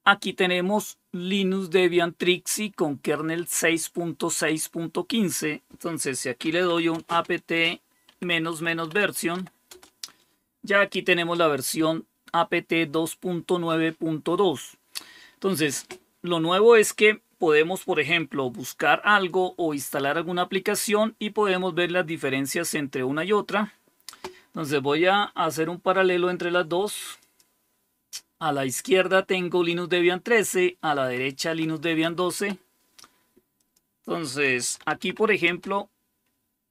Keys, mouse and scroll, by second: 6.1-9.7 typing, 27.1 click, 27.7 click, 33.5 click, 34.2-35.4 typing, 35.4 Return.